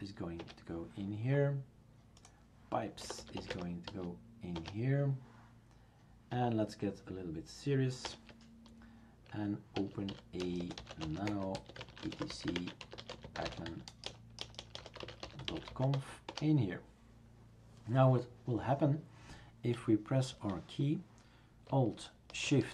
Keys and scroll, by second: 0.4 Return, 2.8-4.4 typing, 4.5 Return, 8.0 super+Return, 9.8-16.2 typing, 16.3 Return.